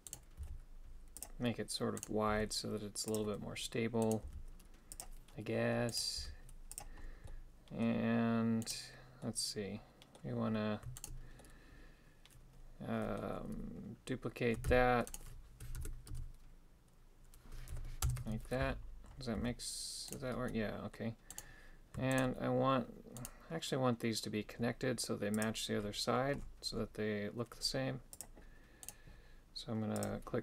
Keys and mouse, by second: 0.1 right click, 0.4 g, 2.0 right click, 2.3 g, 4.1 right click, 4.3 g, 6.0 right click, 6.2 g, 7.3 middle click, 8.7 right click, 9.3 middle click, 11.0 shift+right click, 11.4-13.2 middle drag, 14.7 shift+d, 15.8 ctrl+m, 19.4 g, 20.5 middle click, 22.2 right click, 23.2 right click, 25.4 click, 28.2 click, 28.9 right click, 30.0 click.